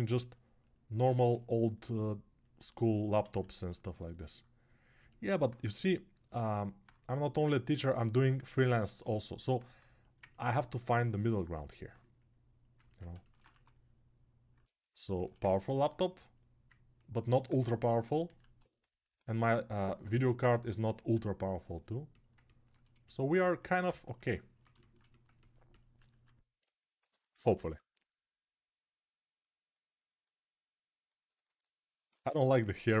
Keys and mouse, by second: 3.2 alt+q, 18.1 alt+q, 18.1-20.1 ctrl+alt+right drag, 20.2 right click, 20.8-23.4 right drag, 23.6-30.4 alt+right drag, 26.0 alt+q, 26.8 g, 27.1 ], 27.4 ], 31.9 alt+q, 32.9-33.0 shift+drag.